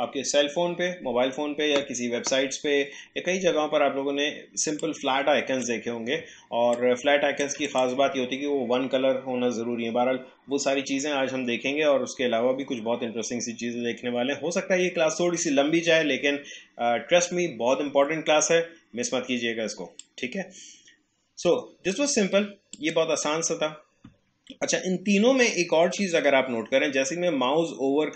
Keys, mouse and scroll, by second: 4.8-6.7 drag, 20.0-22.8 drag.